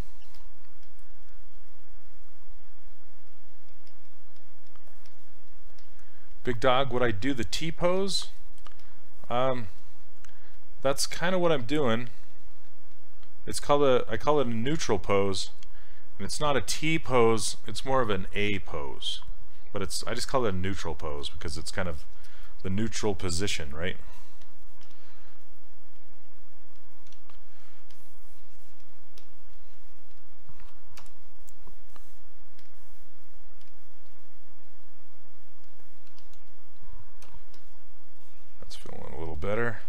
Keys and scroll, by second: 0.3 s, 24.9 s, 27.2 ctrl+z, 31.0 w, 37.3 q.